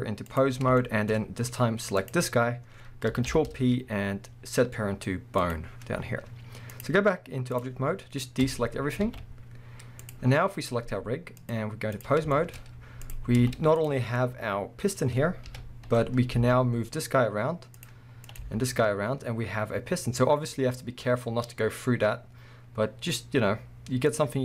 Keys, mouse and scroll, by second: 0.8-2.0 shift+middle drag, 1.1-2.0 scroll up 2, 2.0 click, 2.3-3.3 scroll down 2, 3.3 ctrl+p, 6.7-10.1 drag, 7.8 scroll down 1, 8.5 a, 9.0 alt+a, 9.5 scroll up 1, 11.4-12.3 drag, 12.3-13.0 shift+middle drag, 12.6-13.0 scroll up 2, 13.0 click, 13.3 z, 14.0 scroll down 1, 14.1-17.9 middle drag, 15.4 KP_1, 16.3 g, 18.3 click, 18.4 g.